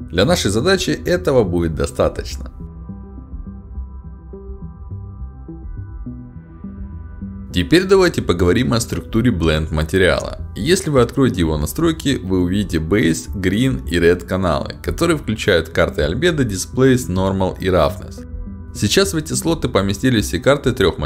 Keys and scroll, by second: 1.1 2, 1.3 Return, 3.4 5, 3.6 Return, 4.8 w, 5.0 a, 6.5 e, 6.7 d, 7.2 s, 7.6 w.